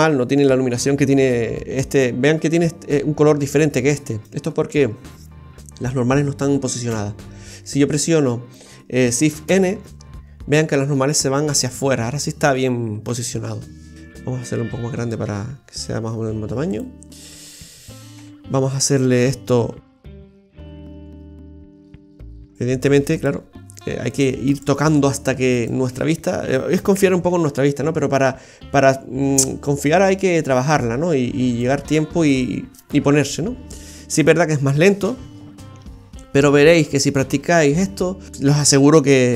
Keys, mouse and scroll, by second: 2.5 Tab, 4.8 Tab, 6.9 ctrl+n, 9.4 shift+n, 13.0 Tab, 13.9 s, 18.2 Tab, 18.5-19.1 scroll up 5, 19.3 middle click, 20.1 shift+scroll up 1, 20.3 shift+middle click, 20.8 middle click, 21.7 scroll up 1, 22.4 right click, 23.2 right click, 24.1 right click, 24.5 alt+shift+right click, 25.6 alt+shift+right click, 25.9-26.4 scroll down 6, 26.9 KP_3, 27.3 KP_1, 29.4 click, 31.9-32.9 scroll up 1, 32.9 scroll up 1, 33.5-34.8 scroll down 2, 38.3 middle click, 38.3-38.6 scroll up 2.